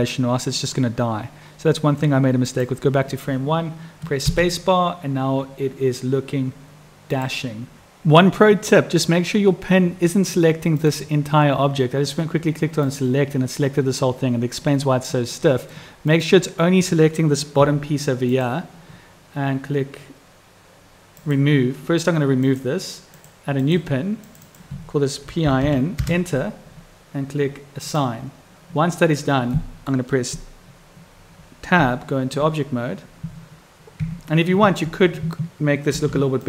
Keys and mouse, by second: 2.9 click, 4.7 space, 7.6 click, 12.8 click, 15.3 click, 16.1-18.7 drag, 21.1 click, 22.4 click, 23.1 click, 24.2 click, 27.8 click, 29.5 click, 31.8 Tab, 33.9 Tab, 35.9 ctrl+r.